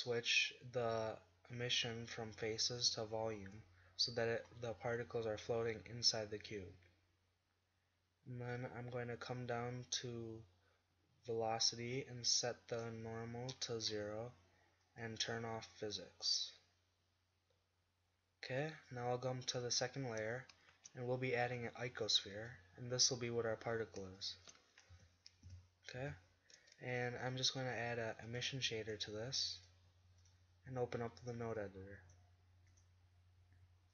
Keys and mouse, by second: 3.7 middle drag, 3.9 middle drag, 4.3 click, 4.5 middle click, 19.5 click, 20.7 shift+a, 24.9 KP_1, 25.5 KP_5, 26.0 KP_5, 31.3 middle click, 31.8 click.